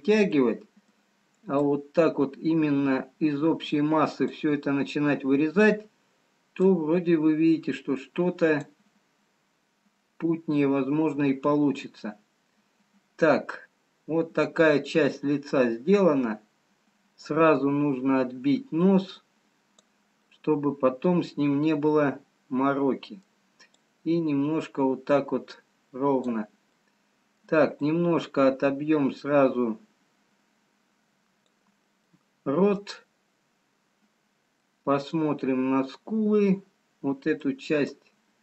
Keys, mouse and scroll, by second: 0.5 middle click, 1.8 click, 7.1 click, 13.1-13.8 scroll down 1, 13.8 middle click, 16.0-16.6 scroll up 1, 19.0 click, 20.4 middle click, 23.8 click, 27.0 middle click, 27.9 click, 32.3 middle click, 33.4-34.7 scroll down 2, 34.9 middle click.